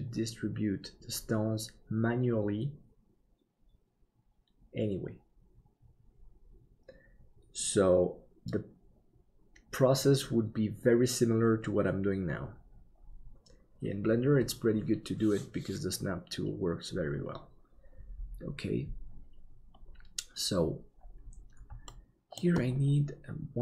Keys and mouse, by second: 21.9 shift+middle click.